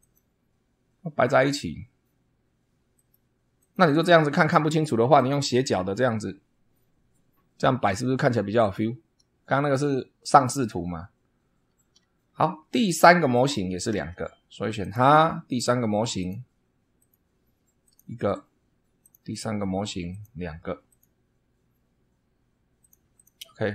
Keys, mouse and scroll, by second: 0.0 click, 2.9 click, 3.5 click, 5.1 click, 13.9 super+2, 14.8 click, 16.1 click, 16.9 click, 17.8 click, 19.0 click, 20.1 click, 20.9 click, 22.8 click, 23.1 click.